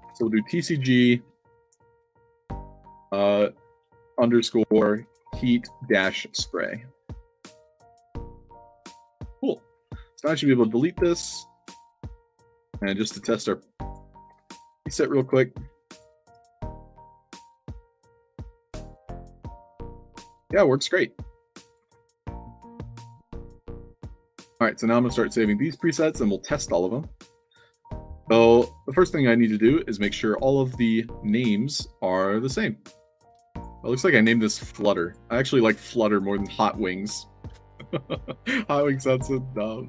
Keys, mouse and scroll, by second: 0.0 shift+c, 4.8-7.0 typing, 7.7 click, 8.6-9.6 alt+drag, 13.7 click, 14.4 c, 15.8 click, 16.1 click, 18.1 i, 18.6-20.1 alt+drag, 20.3 click, 20.8-21.7 alt+drag, 21.8 middle click, 21.8 s, 23.1-25.6 typing, 25.3 click, 26.0-26.5 alt+drag, 26.7-27.5 alt+drag, 33.3 alt+click, 34.9 click, 35.7 click, 37.5 click, 37.6 click.